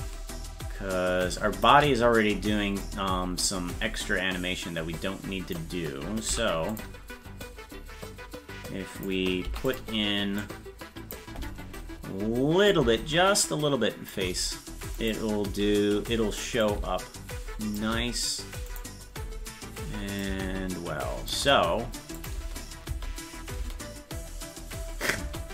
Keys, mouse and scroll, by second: 2.9-5.6 drag, 6.3 i, 7.5-9.1 drag, 10.4 click, 12.7-14.1 drag, 15.0 click, 16.6-17.8 drag, 18.7 click, 20.2-21.3 drag, 23.0 scroll down 1, 23.1 click, 23.1 space.